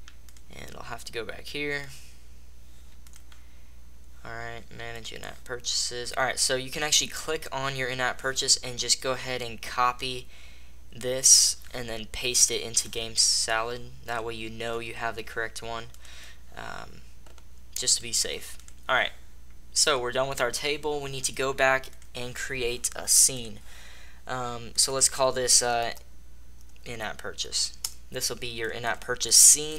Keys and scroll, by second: 27.7 Return.